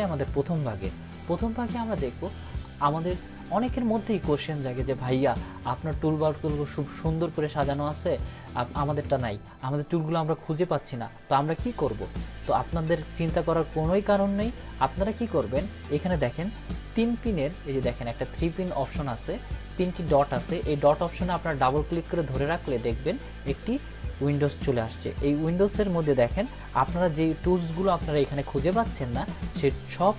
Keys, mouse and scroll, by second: 6.8-7.7 drag, 14.8 click, 21.6-22.8 drag.